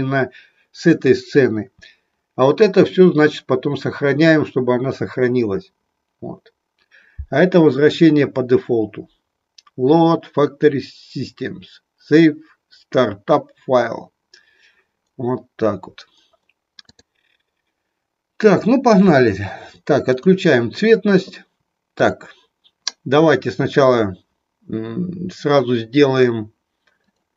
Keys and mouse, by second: 20.1 click.